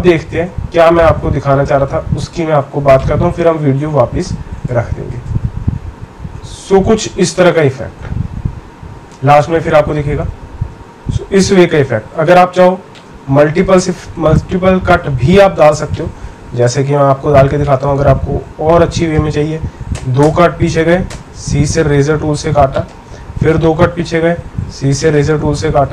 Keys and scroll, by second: 19.9 Left, 20.2 Left, 21.1 c, 23.3 Left, 23.5 Left.